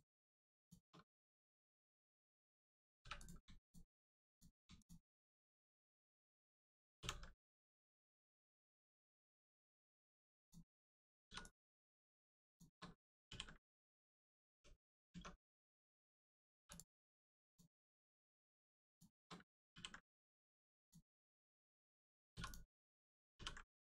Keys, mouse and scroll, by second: 0.5 shift+click, 1.0 scroll down 1, 3.0 3, 3.1 click, 3.6 shift+click, 4.3 click, 4.7 shift+click, 6.9 ctrl+e, 10.3 click, 11.8 shift+click, 12.4 shift+click, 13.2 ctrl+e, 14.0 click, 14.4 Tab, 15.5 click, 16.5 click, 16.5 3, 16.7 click, 17.4 ctrl+click, 18.1 click, 18.9 shift+click, 19.7 ctrl+e, 20.7 click, 23.3 ctrl+e.